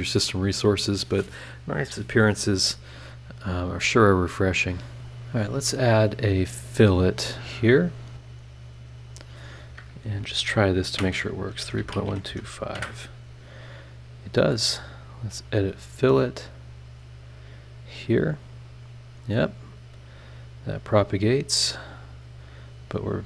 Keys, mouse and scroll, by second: 0.3 click, 0.8 scroll up 1, 3.3 click, 3.7-5.0 drag, 6.0 click, 7.3 click, 9.0 click, 10.1 BackSpace, 11.6-12.3 typing, 12.7 KP_Enter, 14.8 right click, 15.3 click, 16.6 click, 18.2 click, 20.0-20.7 scroll up 2, 21.5 right click, 22.1 click.